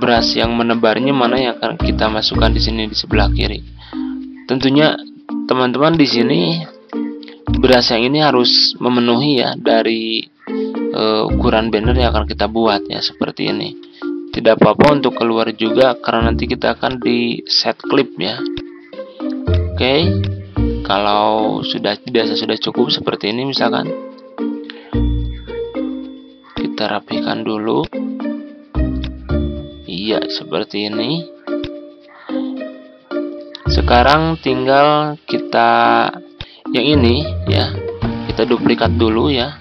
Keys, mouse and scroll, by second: 1.2-3.1 drag, 5.9 ctrl+click, 7.5-9.1 drag, 12.3 ctrl+click, 14.2 click, 15.4 ctrl+scroll down 1, 16.8 ctrl+click, 18.4-23.1 drag, 24.1-31.1 drag, 33.7 ctrl+scroll up 1, 34.9 ctrl+scroll down 1, 36.3 click, 38.3 ctrl+d, 39.3-39.6 drag.